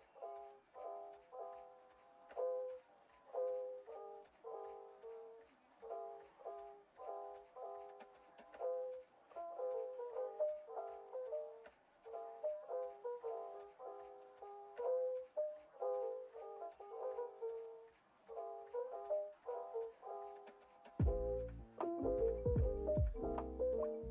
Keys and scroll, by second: 0.1 BackSpace, 0.4 0, 7.8 0, 9.2 Return, 22.0 0, 23.1 1.